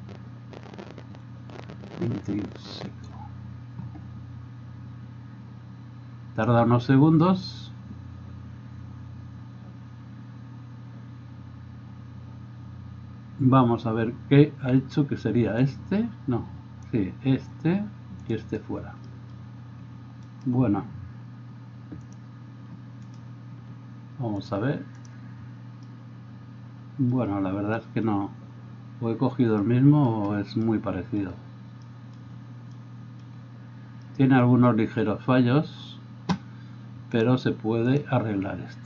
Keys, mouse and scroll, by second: 17.0-18.3 middle drag, 18.3 click, 18.4-20.4 middle drag, 20.4 right click, 20.6-22.2 middle drag, 22.2-38.8 drag, 23.1 middle drag, 23.1 right drag.